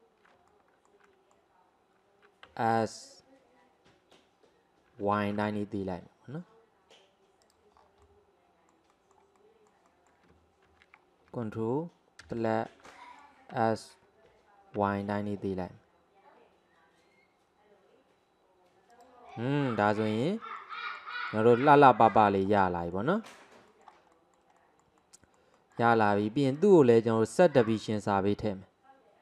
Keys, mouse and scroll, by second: 0.5-2.5 middle drag, 2.5 s, 7.8 scroll down 2, 8.1-10.7 middle drag, 10.7 ctrl+z, 12.3 KP_Add, 12.9-13.6 middle drag, 13.6 s, 19.3-22.7 middle drag, 22.7 scroll up 3, 23.0-26.6 middle drag, 26.6 click, 27.7 click.